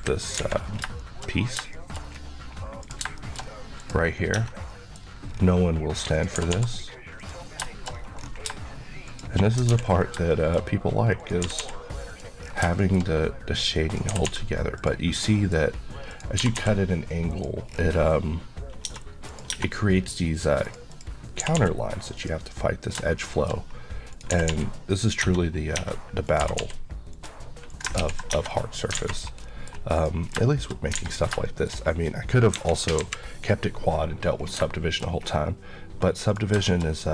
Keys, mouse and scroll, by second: 0.0 KP_3, 0.4 alt+a, 0.7 scroll down 1, 1.0 middle click, 1.4 scroll up 1, 1.8 middle click, 2.1-2.9 scroll up 1, 2.9 click, 3.3 shift+middle click, 3.5 scroll up 1, 3.8 click, 4.2 scroll up 1, 4.4 Tab, 4.8 middle click, 5.1 scroll up 1, 6.2 click, 6.6 g, 7.3 click, 7.7 shift+middle click, 8.3 scroll up 1, 9.1 click, 9.8 ctrl+x, 10.0 scroll down 1, 10.4 shift+middle click, 10.7 scroll up 1, 11.2 click, 11.6 typing, 12.2 click, 12.5 scroll down 1, 12.8 shift+middle click, 13.1-13.9 shift+scroll up 1, 13.9 click, 14.2 typing, 14.8 click, 15.2 middle click, 15.7 scroll up 1, 16.1 click, 16.5 typing, 17.3 click, 17.7 scroll down 1, 19.3 click, 19.6 Tab, 19.8 scroll up 1, 20.7 click, 21.4 g, 21.6 g, 22.3 click, 23.3 shift+middle click, 24.2 click, 24.4 typing, 25.0 click, 25.3 Tab, 26.3 click, 26.5 typing, 27.2 click, 28.1 ctrl+x, 28.4 Tab, 28.5 scroll down 1, 29.0 alt+a, 29.2-29.5 scroll down 1, 29.5 middle click, 30.0 click, 30.6 shift+middle click, 31.0 alt+a, 31.2-32.0 alt+scroll down 4, 31.5 shift+middle click, 32.6 KP_1, 33.0 KP_3, 34.5 scroll, 34.6 shift+scroll down 1, 34.8 shift+middle click, 35.2 scroll up 1, 36.3 click, 36.7 shift+middle click, 36.9 scroll up 1.